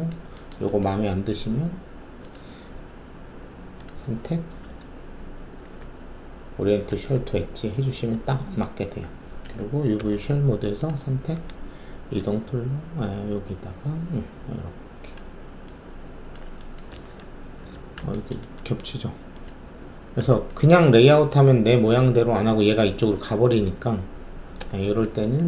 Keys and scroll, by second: 0.9 alt+2, 9.9 alt+5, 11.3 w, 17.6 alt+r, 21.9 alt+z, 23.5 ctrl+z.